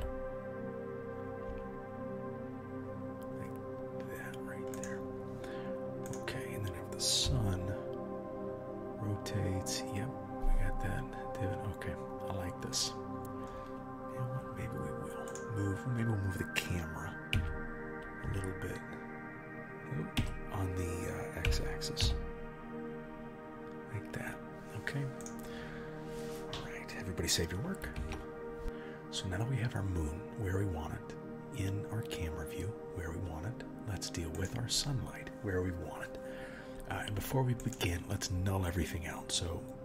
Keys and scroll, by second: 0.0 r, 7.3 r, 17.4 g, 21.5 g, 28.0 ctrl+s.